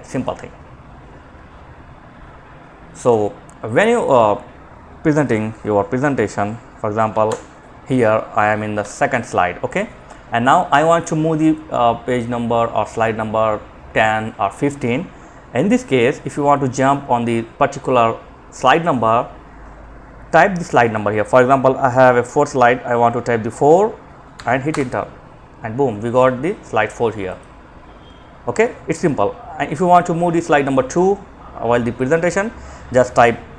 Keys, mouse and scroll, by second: 2.9 click, 6.4 F5, 8.0 Page_Down, 23.5 4, 23.9 Return, 25.3 click, 33.3 2.